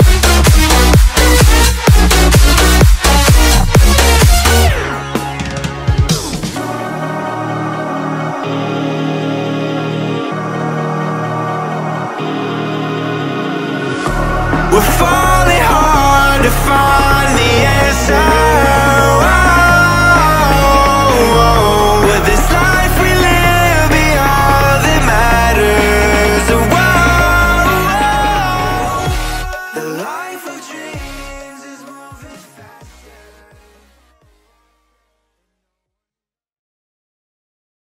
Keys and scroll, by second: 14.1 v, 20.1 Return, 22.2 Up, 24.6 Return, 25.0 Up, 26.5 space.